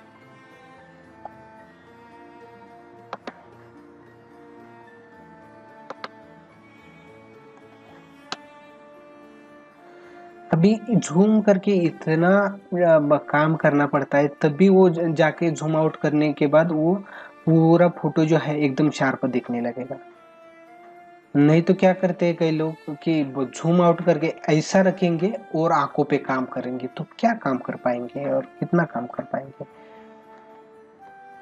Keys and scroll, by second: 3.1 ctrl+alt+z, 5.9 ctrl+alt+z, 7.6 space, 30.6 space.